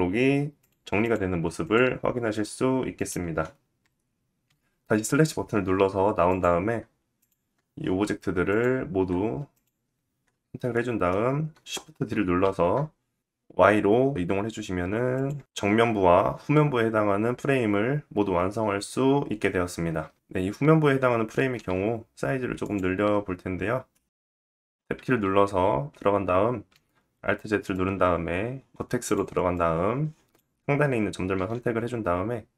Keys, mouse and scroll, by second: 0.1 click, 0.6 click, 1.2 click, 2.5 click, 2.6-4.0 middle drag, 4.0 /, 5.8 click, 6.7 shift+click, 8.0 shift+click, 9.1 shift+click, 10.1 scroll down 1, 10.3 middle click, 10.8-11.6 scroll down 1, 12.0 shift+d, 17.1-17.5 scroll up 3, 17.5 shift+middle click, 19.8-27.3 middle drag, 21.8 /, 23.2 /, 23.8 Tab, 26.2 alt+z, 27.3-30.4 drag, 29.2 ctrl+z, 30.4 middle click, 30.8-32.5 drag.